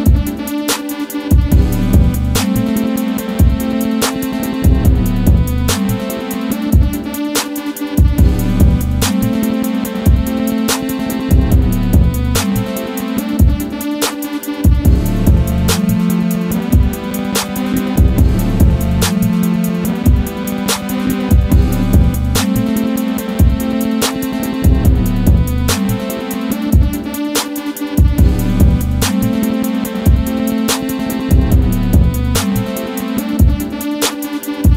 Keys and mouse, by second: 2.9-4.2 drag, 5.1-5.8 drag, 8.1-10.2 middle drag, 11.4 click, 12.0 s, 14.5 s, 16.3 click, 16.7 middle click, 18.1 click, 19.1 click, 20.2 click, 20.8 click, 22.0-22.7 middle drag, 23.4-24.1 middle drag, 25.4 click, 26.6 click, 27.0 click, 27.8-30.1 middle drag, 30.5-31.7 middle drag, 32.2 KP_1.